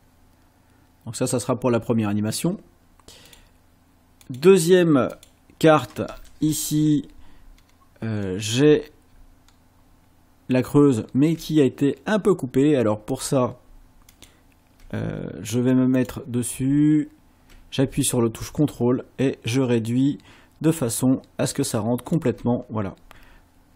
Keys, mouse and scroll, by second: 3.3 click, 4.2 click, 5.2 click, 7.6-8.4 ctrl+scroll down 4, 9.4-9.8 ctrl+scroll up 2, 11.0 ctrl+scroll up 2, 13.2 click, 14.1 ctrl+click, 16.0 click, 18.4-22.4 ctrl+drag.